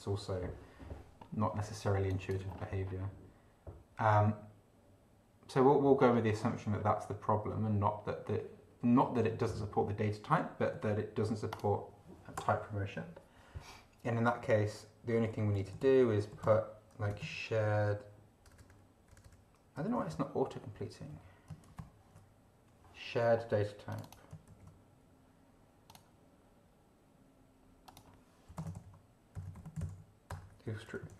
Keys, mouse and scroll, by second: 2.1 click, 2.5-2.8 scroll up 1, 6.0-7.7 scroll up 10, 11.5 click, 12.3 BackSpace, 14.4 Down, 15.3 End, 15.6 Left, 16.5-18.5 typing, 20.2 ctrl+Left, 21.1 ctrl+Right, 21.9 ctrl+alt+b, 23.9 click, 24.5 ctrl+c, 25.9 click, 27.9 click, 28.5-31.1 typing.